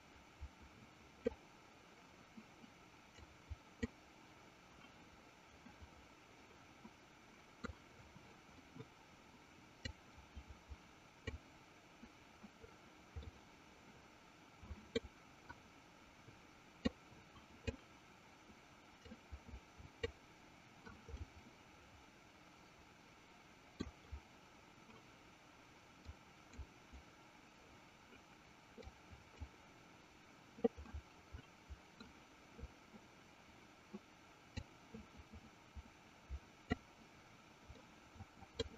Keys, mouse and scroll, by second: 3.6 click, 5.9-7.8 middle drag, 10.3-11.4 drag, 13.6-15.5 middle drag, 17.4-18.5 drag, 19.8 click, 21.5-23.9 middle drag, 26.4 click, 29.5 click, 31.0-32.2 middle drag, 35.0-37.6 drag, 38.0 middle click.